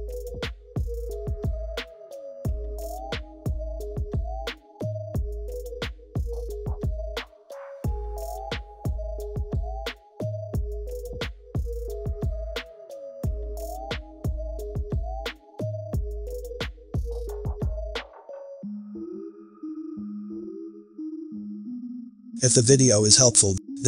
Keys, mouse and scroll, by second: 2.8 click, 3.7 click, 8.8 click, 11.7 right click, 13.6 click.